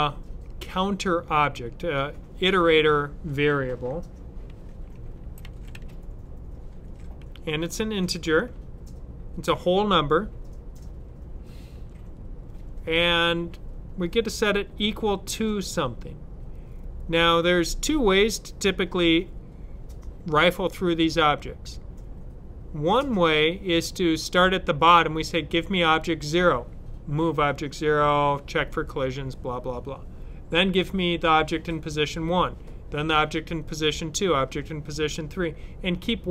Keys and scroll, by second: 4.3-6.1 typing, 11.6 =.